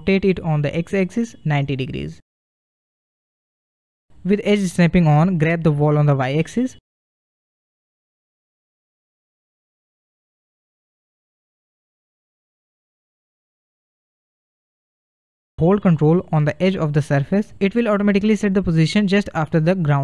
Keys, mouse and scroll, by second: 2.7-3.8 shift+middle drag, 3.8-7.0 drag, 7.5-8.7 middle drag, 8.7 g, 13.0-14.5 middle drag, 14.5 g, 19.4-20.0 middle drag.